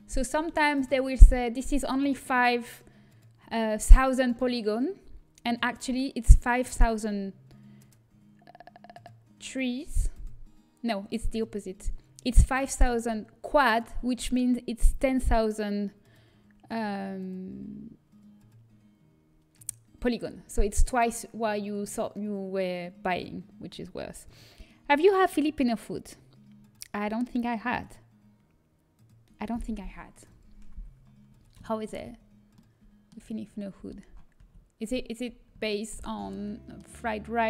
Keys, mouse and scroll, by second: 31.0 middle click, 34.0 a, 34.3 a.